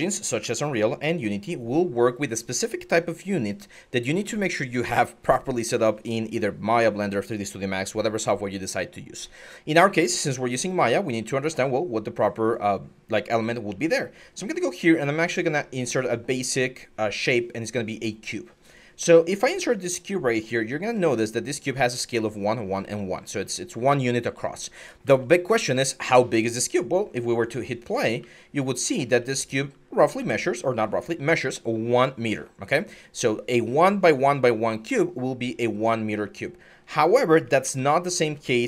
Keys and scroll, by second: 0.0-0.2 typing, 4.0 typing, 10.0-10.8 typing, 24.8-25.3 typing, 27.9-32.5 typing, 37.4 alt+Tab, 37.8 alt+Tab, 38.4 alt+Tab.